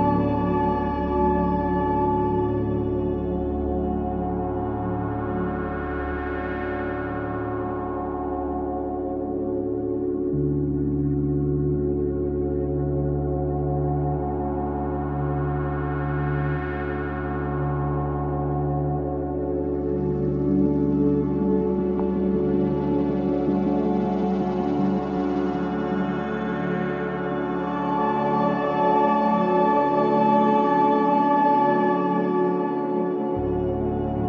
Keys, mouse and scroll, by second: 0.0-1.5 middle drag, 3.0-3.4 middle drag, 3.4-3.8 scroll up 2, 3.8-4.1 middle drag, 4.1-4.4 scroll down 2, 4.4-5.9 middle drag, 5.9 scroll up 1, 6.2-7.8 middle drag, 8.2-9.6 middle drag, 10.4 scroll down 1, 10.5-12.5 middle drag, 14.6-16.1 drag, 16.6-17.6 drag, 17.6-19.1 middle drag, 19.1-19.5 scroll up 1, 19.5-20.0 middle drag, 20.0 click, 21.1-21.6 drag, 23.3 shift+d, 25.2 p, 26.6 drag, 26.9 click, 27.7 click, 28.2-29.3 drag, 29.3 e, 33.0 l, 33.9 click, 34.0 l.